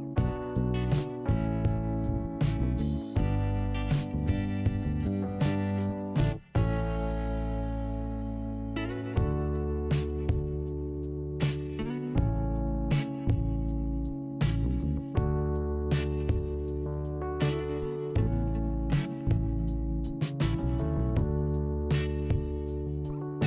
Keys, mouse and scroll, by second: 0.1 click, 0.6 click, 1.4 click, 3.0 click, 4.4 click, 5.4 click, 5.5 click, 6.3 click, 7.5 click, 10.2 click, 10.2 click, 11.1 click, 13.2 click, 13.3 click, 14.4 click, 15.4 click, 16.6 click, 17.5 click.